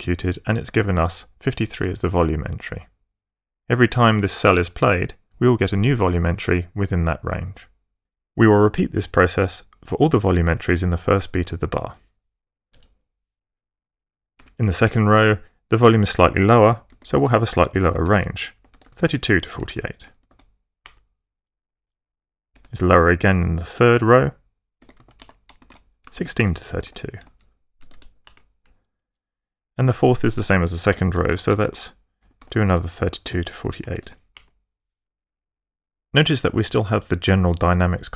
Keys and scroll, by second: 8.0 Up, 12.6 Down, 14.2 =, 16.5-20.1 typing, 20.7 Return, 21.6 Down, 22.4 =, 24.4-28.1 typing, 28.8 Down, 29.4-34.2 typing.